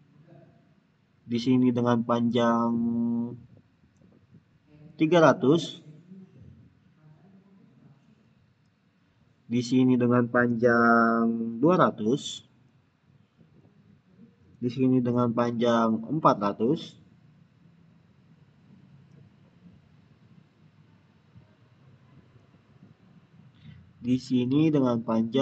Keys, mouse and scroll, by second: 4.7 click, 8.5 click, 12.5 click, 15.8 click, 19.0 click, 24.3 click.